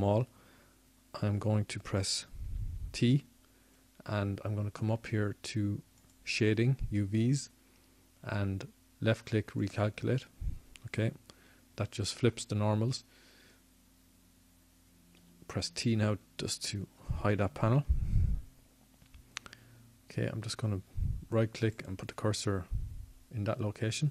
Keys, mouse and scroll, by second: 2.9 a, 3.5 a, 7.6 t, 11.1-13.0 drag, 14.8 click, 20.3-21.8 drag, 20.3 t.